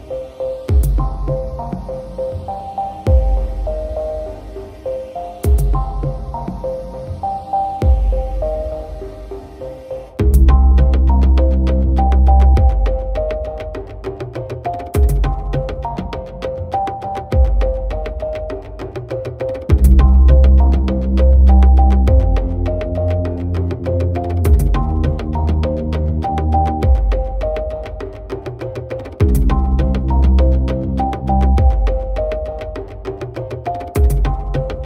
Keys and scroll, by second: 25.3 ctrl+j, 28.9-30.1 typing.